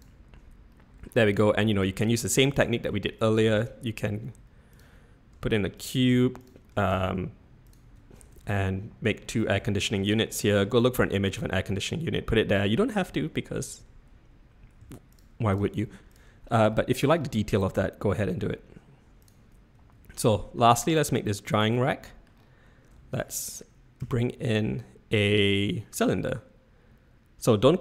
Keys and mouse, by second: 0.8 middle drag, 1.4 shift+drag, 3.5 shift+a, 5.3 s, 6.0 g, 6.7 s, 8.3 shift+d, 10.3-10.6 middle drag, 11.7 middle click, 14.8-16.1 typing, 16.7 shift+middle drag, 19.7 z, 20.3 shift+middle click, 21.8-22.2 middle drag, 24.0 shift+a.